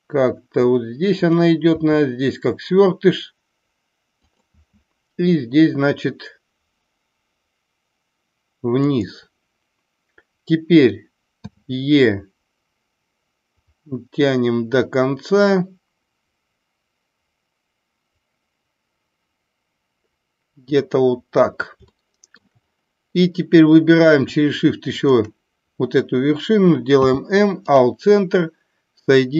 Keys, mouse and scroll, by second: 1.2 click, 4.1 click, 4.5 e, 8.7 click, 22.0 shift+middle click, 24.8 shift+click.